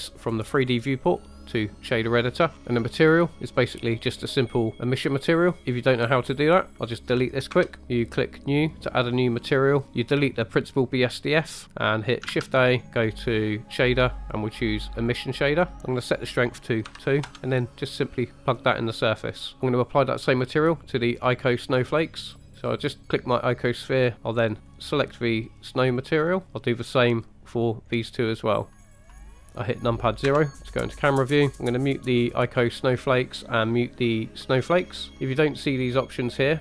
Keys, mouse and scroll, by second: 0.1-1.9 drag, 2.5 shift+middle click, 2.5 scroll up 3, 3.7-5.6 drag, 6.7 click, 7.7 Delete, 11.6 click, 12.3 shift+a, 16.2-17.3 drag, 17.7 drag, 21.7 click, 24.6-26.4 drag, 26.9 click, 28.2 click, 29.0 click, 29.4-30.3 scroll down 3, 30.3 KP_0, 32.8 click, 34.6 click.